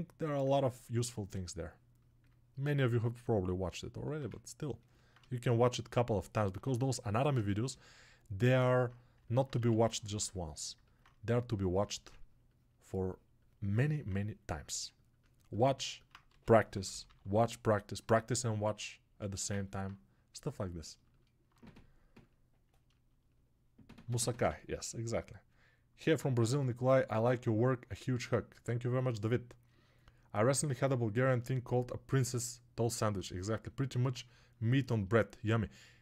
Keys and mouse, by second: 15.8-36.0 alt+drag, 32.9 middle click, 33.8 middle click.